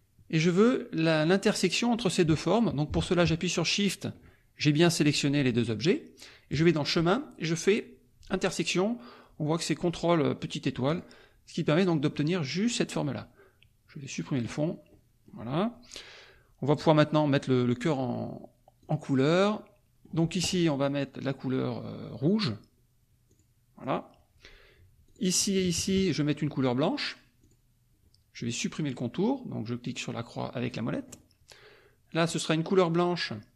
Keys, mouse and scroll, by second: 3.7 shift+click, 6.5 click, 10.9 click, 14.4 click, 14.6 middle click, 14.9-15.4 scroll up 2, 15.4-17.8 scroll down 2, 17.8-18.5 scroll down 1, 18.5 scroll down 1, 18.9 click, 19.4 middle click, 23.3 click, 25.0 click, 25.6 shift+click, 27.4 click, 30.9 middle click, 32.2 click.